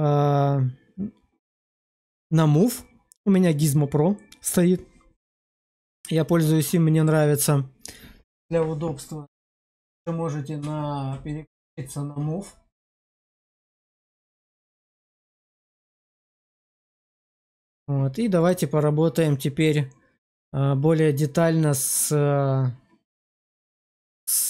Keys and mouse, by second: 14.8 alt+q, 16.3 alt+q, 17.5 click, 21.9 click.